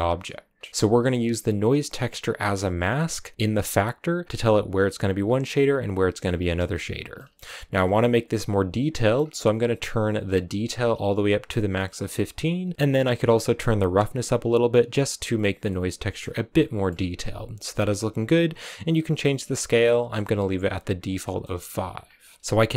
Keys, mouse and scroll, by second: 0.4 scroll down 1, 0.6 scroll up 1, 1.0-5.8 drag, 6.4-8.3 middle drag, 8.3 click, 8.9 middle click, 9.1-10.5 scroll up 3, 10.5 scroll up 1, 10.8-15.5 drag, 15.5 middle click, 16.2 scroll up 2, 16.4 middle click, 16.8-17.2 scroll down 3, 18.4-21.0 drag, 21.0 scroll down 2, 21.1 middle click, 21.9-22.7 scroll down 1.